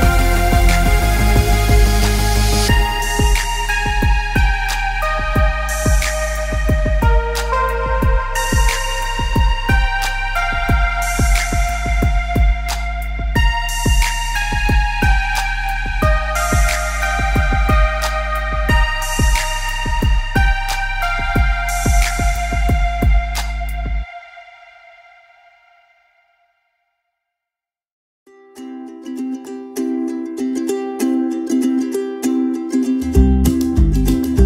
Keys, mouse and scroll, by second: 0.9 click, 4.8 click, 9.9 click, 12.7 click, 17.3 click, 21.1 alt+Num_Lock, 21.1 scroll up 1, 21.2 scroll down 1, 21.4-21.9 scroll up 2, 22.5 click, 25.8 alt+scroll down 1, 26.7 alt+scroll down 1, 26.8 scroll up 1, 27.9 click, 30.7 click, 31.6 shift+click, 32.7 click.